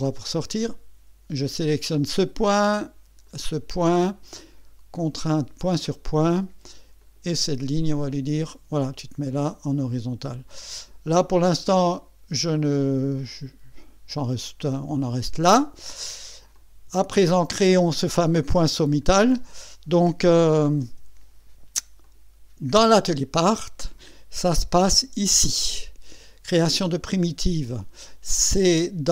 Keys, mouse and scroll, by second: 1.5 click, 3.3 click, 5.3 click, 7.0 click, 8.1 click, 9.2 scroll down 1, 15.0 click, 15.9-16.2 scroll down 2, 16.5-17.6 drag, 20.4 KP_1, 20.8 KP_2, 22.0 click, 23.0 click, 28.4 click.